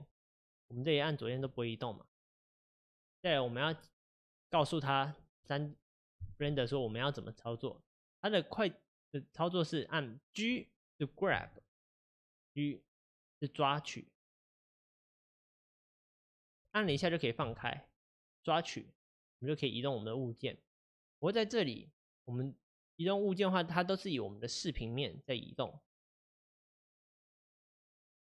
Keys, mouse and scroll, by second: 1.0 click, 1.4 click, 3.3-11.4 middle drag, 11.4 g, 27.6-28.2 middle drag.